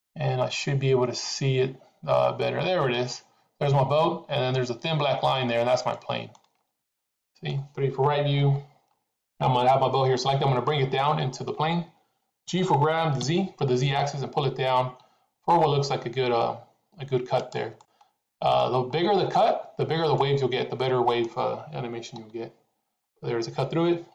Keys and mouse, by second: 5.8 middle click, 6.8 middle click, 8.3 KP_3, 12.4 g, 17.7-18.5 middle drag, 20.1-21.2 middle drag, 22.1 KP_3.